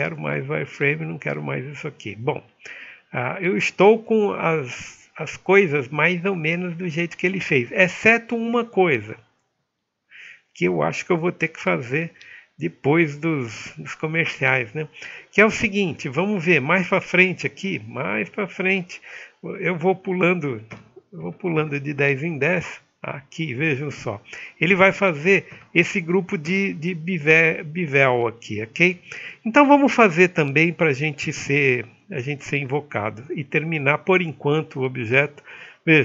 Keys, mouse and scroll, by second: 15.9 middle click, 20.9-21.3 scroll up 1, 21.3 right click, 21.7 middle click, 22.0 r, 24.0 alt+middle click, 24.8 click, 25.6-26.5 scroll up 1, 26.5-33.3 alt+middle drag.